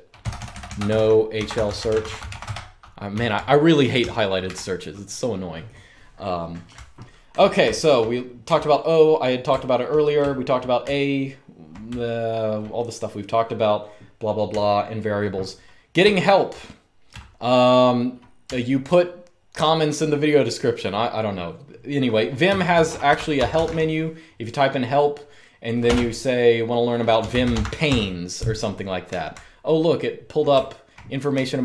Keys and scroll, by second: 0.0-4.1 typing, 6.4-8.1 typing, 9.2-12.0 typing, 14.4-18.4 typing, 22.2-23.8 typing, 25.5 space, 26.6-27.7 typing, 28.8-31.6 typing.